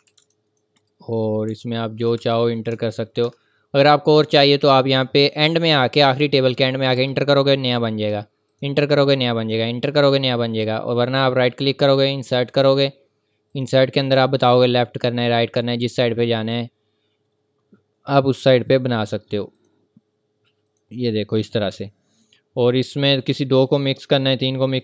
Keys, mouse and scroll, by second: 0.5 click, 1.5-3.2 typing, 2.0 click, 2.5 click, 3.1 click, 5.3 click, 6.9 Return, 8.5 click, 8.8 Return, 9.4 click, 9.8 Return, 10.5 click, 11.0 right click, 13.5 click, 18.3 click, 23.0 click.